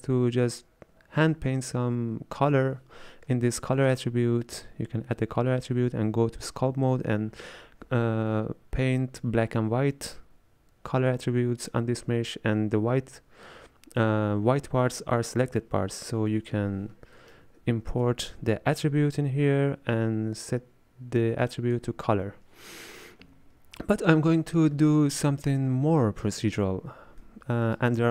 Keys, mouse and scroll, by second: 3.9 click, 17.2-17.9 middle drag, 17.9 shift+a, 21.6 click, 25.5-28.1 middle drag.